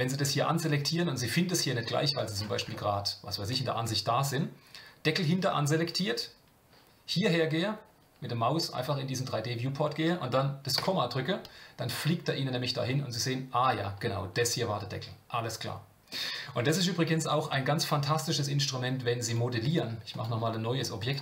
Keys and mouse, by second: 3.3 shift+middle click, 11.1 KP_Decimal, 13.4-16.6 middle drag, 19.3-21.2 drag.